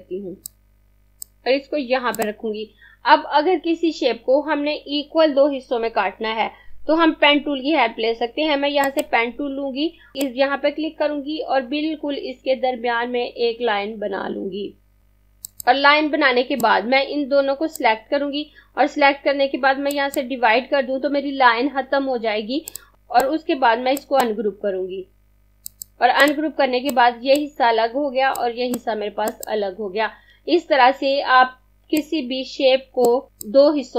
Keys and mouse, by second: 8.7 click, 15.0 click, 24.0 right click, 25.7 click, 31.8 click.